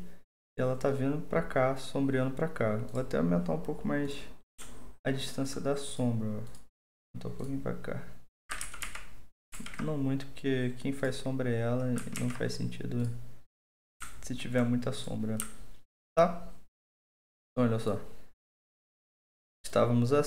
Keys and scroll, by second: 8.6 ctrl+z, 8.8 ctrl+z, 9.5 ctrl+z, 12.1 ctrl+z.